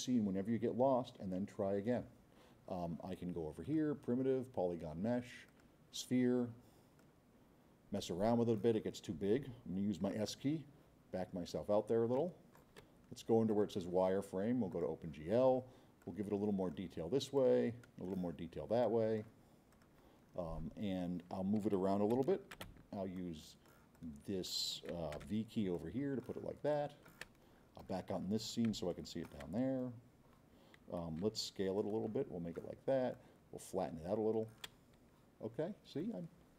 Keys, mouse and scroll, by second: 3.6 drag, 5.5 click, 7.0 click, 8.2 click, 10.4 middle click, 11.0 middle click, 11.4 middle click, 11.9 middle click, 12.1 right click, 13.5 click, 14.7 click, 16.0-16.9 drag, 17.3-18.1 drag, 20.2 middle click, 20.4 middle click, 20.8 middle click, 22.1 c, 22.7 v, 23.2-23.8 drag, 23.9-24.6 drag, 25.7-26.2 drag, 26.7 click, 27.4 middle click, 27.4-27.9 scroll, 27.8 middle click, 28.1 middle click, 28.4 middle click, 28.9 click, 29.7 middle click, 31.3 x, 31.8 click, 33.1-34.5 drag.